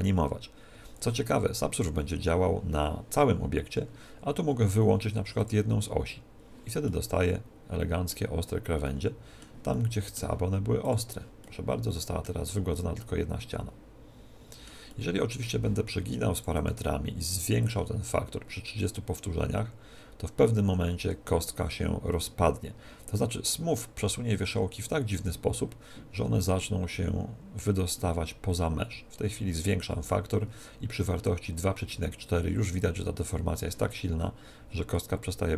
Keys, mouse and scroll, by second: 5.4 click, 6.8-8.6 middle drag, 8.8-14.2 middle drag, 10.8 click, 14.8-16.6 middle drag, 16.3-19.5 drag, 34.0-35.5 middle drag.